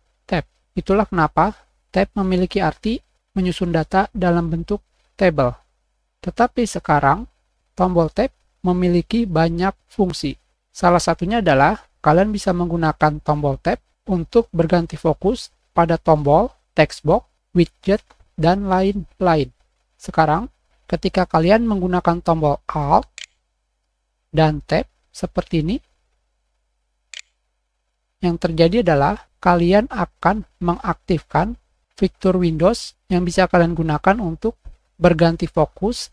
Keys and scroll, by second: 6.6 2, 7.7-8.5 typing, 8.6 Tab, 21.5 5, 27.0 alt+Tab.